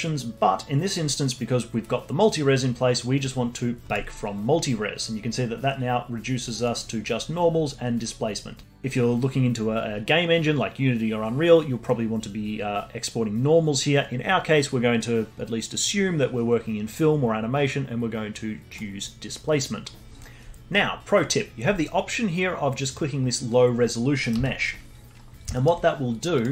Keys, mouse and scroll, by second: 3.9 click, 4.8 scroll down 2, 6.5-9.1 drag, 19.8 scroll down 2, 22.9 click, 24.2 middle click, 24.3 z, 25.1-25.5 scroll up 1, 25.5 alt+middle click, 26.3 click.